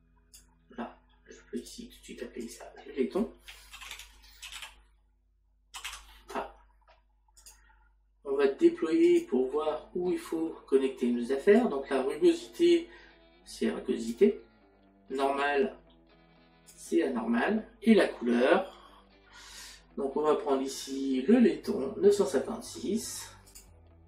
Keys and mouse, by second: 1.6 click, 7.4 click, 9.1 click, 11.6 click.